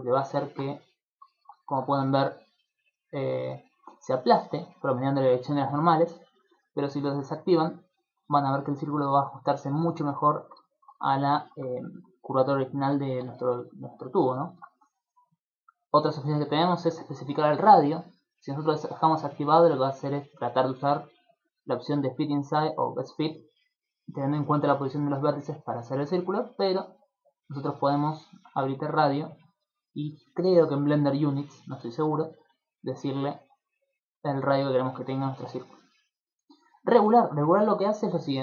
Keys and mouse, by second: 0.1 shift+middle click, 0.4 ctrl+middle click, 0.7 z, 1.3 shift+middle click, 1.5 ctrl+middle click, 7.3 click, 9.8 middle click, 10.3 ctrl+middle click, 10.7 shift+middle click, 11.1 ctrl+middle click, 11.4 shift+middle click, 12.7 z, 13.1 shift+middle click, 13.5 ctrl+middle click, 14.2 ctrl+middle click, 14.4 shift+middle click, 16.9 click, 17.5 click, 21.9 click, 26.8 click, 28.6 click, 32.0 shift+click, 36.1 click, 36.7 click, 37.1 click, 37.5 click.